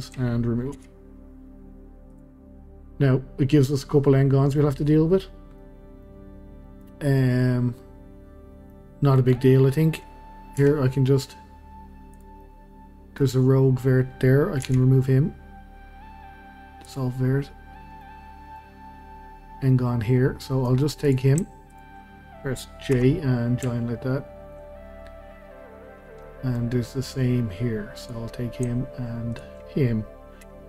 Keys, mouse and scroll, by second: 0.7 x, 5.6-10.6 middle drag, 10.6 1, 12.1 click, 12.4-13.5 middle drag, 13.5-14.6 scroll up 1, 14.6 x, 18.0 scroll down 1, 18.0-21.0 middle drag, 21.0 click, 21.7 shift+click, 23.0 j, 23.4-23.7 scroll down 1, 23.7-25.9 shift+middle drag, 25.9 scroll down 1, 26.2-28.0 middle drag, 28.0 click, 29.3 shift+click, 30.5 j.